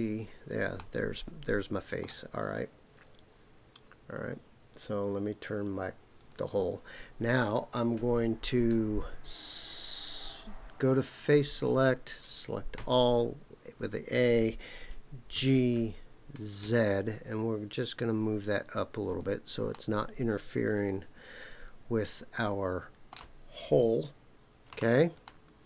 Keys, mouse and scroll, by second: 0.7-2.0 middle drag, 6.2 click, 11.5 click, 12.7 a, 15.3 g, 16.6 z, 19.1 click, 19.7-23.2 middle drag, 25.2 middle click.